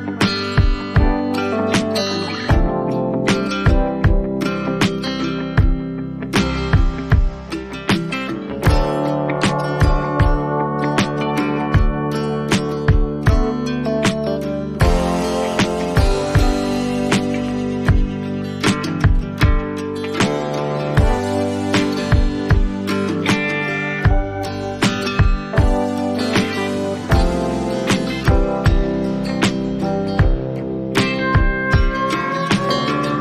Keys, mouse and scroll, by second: 2.8 click, 5.0 click, 24.0 click, 25.3 click.